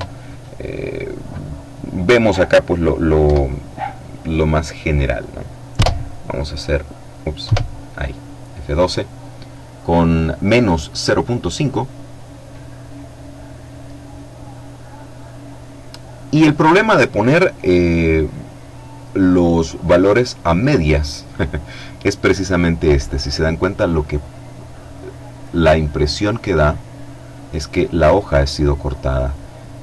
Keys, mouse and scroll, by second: 2.3 F12, 4.9 F12, 6.5 F12, 23.4-23.9 scroll up 1, 23.9-24.5 scroll down 1, 24.9-26.0 middle drag, 27.9 middle click, 28.4-28.9 scroll down 1, 28.9 middle click.